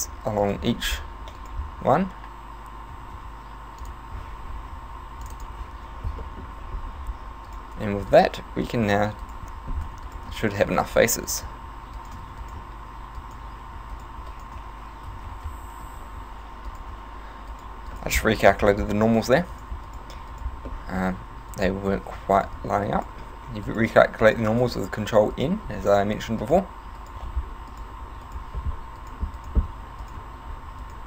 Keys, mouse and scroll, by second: 0.4 right click, 1.4 shift+right click, 3.0 f, 3.2 w, 5.2 click, 5.5 click, 6.3 middle click, 6.8 scroll up 2, 7.5 right click, 8.1 shift+right click, 8.7 right click, 9.3 shift+right click, 10.1 right click, 10.1 f, 10.7 shift+right click, 11.4 right click, 12.0 shift+right click, 12.2 f, 12.4 right click, 13.2 shift+right click, 14.0 right click, 14.3 shift+right click, 14.6 f, 15.1 a, 15.5 a, 15.8 ctrl+n, 16.2 a, 16.7 right click, 17.5 shift+right click, 18.0 right click, 18.4 shift+right click, 19.1 f, 19.6 right click, 19.9 shift+right click, 20.3 shift+right click, 20.7 shift+middle click, 21.5 shift+right click, 22.2 f, 22.4 right click, 23.0 shift+right click, 23.7 right click, 24.2 shift+right click, 24.6 f, 25.4 right click, 25.9 shift+right click, 26.4 right click, 27.0 right click, 27.3 f, 27.7 right click, 28.2 shift+right click, 29.0 right click, 29.4 shift+right click, 29.8 f, 30.0 right click, 30.8 shift+right click.